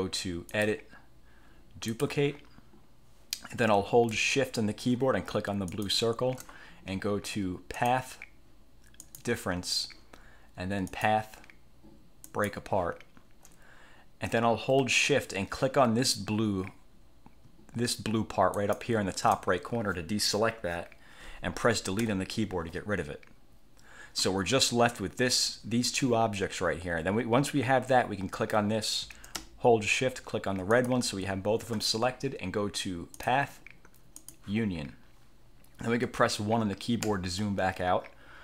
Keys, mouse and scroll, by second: 0.6 click, 2.0 click, 5.8 shift+click, 7.9 click, 9.1 click, 11.0 click, 12.3 click, 18.7 shift+click, 22.1 Delete, 28.5 click, 30.9 shift+click, 33.3 click, 34.3 click, 37.2 1.